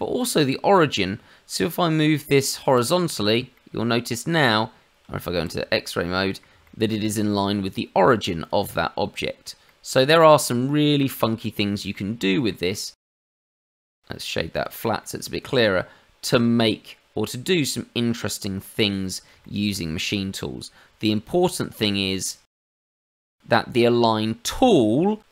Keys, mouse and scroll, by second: 3.5 middle click, 5.3 shift+z, 5.8 middle click, 6.6 shift+middle click, 8.4 click, 9.6 middle click, 11.0 shift+z, 11.4 middle click, 12.2 shift+middle click, 12.6-13.2 scroll up 1, 13.2 middle click, 13.2 scroll up 1, 13.3 Tab, 13.8 right click, 15.0 middle click, 19.0 scroll down 2, 19.4 shift+middle click, 19.9-22.1 scroll down 1, 22.1 click.